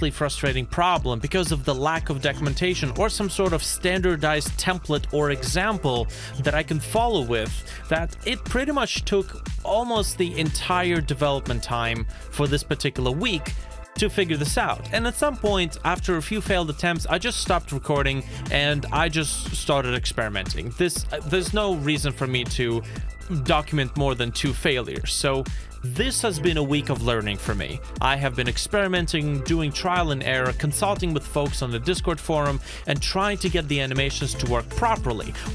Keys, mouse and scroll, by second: 0.0 shift+middle click, 0.1 space, 1.9 space, 2.4 scroll down 1, 3.0 shift+middle click, 5.0 middle click, 5.1-5.7 scroll down 2, 5.9 middle click, 6.7 alt+middle click, 11.0 g, 13.8 middle click, 14.4 scroll down 2, 15.3-15.7 scroll up 1, 16.7 middle click, 17.3-18.3 scroll down 1, 18.4-18.9 shift+scroll down 1, 18.9-19.4 shift+scroll down 1, 20.2 middle click, 20.6 scroll up 1, 21.8 shift+middle click, 28.2 ctrl+z, 28.7 alt+middle click, 30.2 middle click, 31.8 shift+middle click, 33.8 space, 35.4 space.